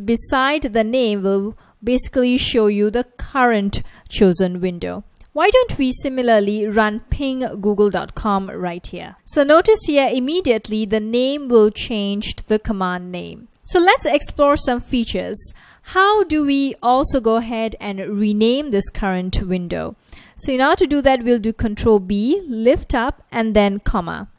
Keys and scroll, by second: 5.6-9.4 typing, 10.2 F1, 12.1 F1, 22.1 ctrl+b, 23.6 ,.